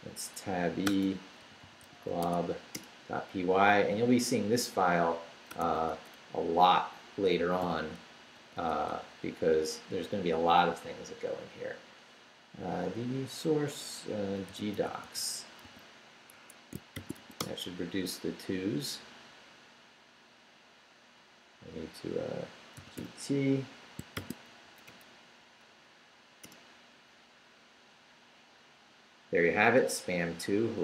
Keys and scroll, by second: 0.0-2.5 typing, 2.7 Return, 5.6 shift+a, 6.3 shift+Left, 7.0 Left, 7.6 i, 8.2 BackSpace, 14.3-15.6 typing, 16.3 Escape, 16.7-17.7 typing, 22.6-24.7 typing, 26.4 Return.